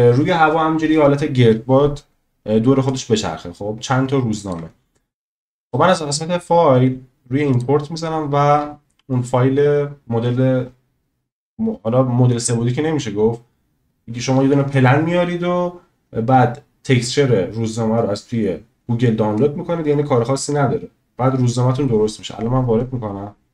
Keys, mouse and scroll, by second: 2.9-4.5 drag, 4.5-5.7 middle drag, 5.7-23.5 drag.